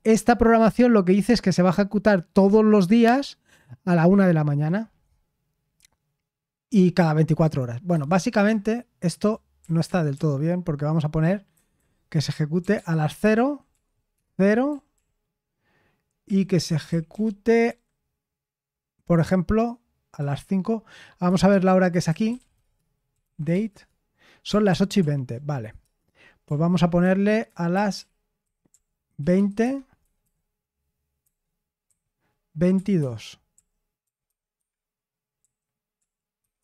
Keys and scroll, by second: 7.9 Escape, 8.4-14.9 typing, 15.9-17.6 typing, 20.1 typing, 21.2-23.9 typing, 21.4 Escape, 24.6 ctrl+p, 24.9 ctrl+p, 25.7 Return, 26.9-36.6 typing.